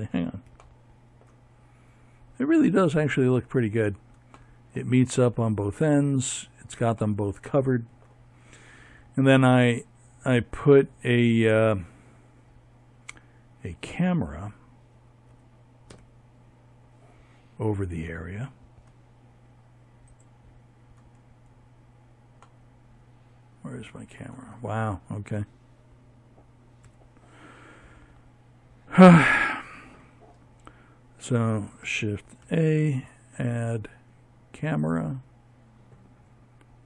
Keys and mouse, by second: 4.0-8.1 middle drag, 13.0 a, 13.6 Tab, 17.8 click, 24.5 KP_7, 30.1 shift+a.